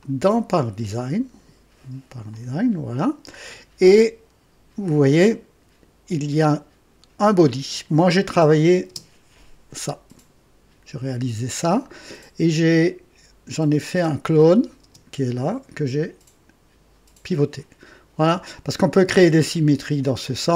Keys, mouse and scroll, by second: 0.0 click, 2.3 click, 3.8 click, 8.3 click, 8.9 space, 14.8 space.